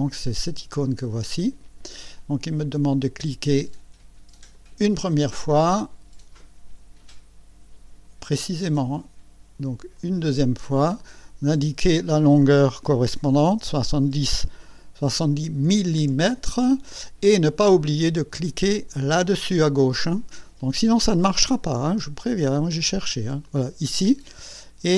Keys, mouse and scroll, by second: 1.2 click, 4.5 click, 9.9 click, 11.8 click, 12.7 KP_7, 13.5 KP_0, 15.6 m, 23.4 click.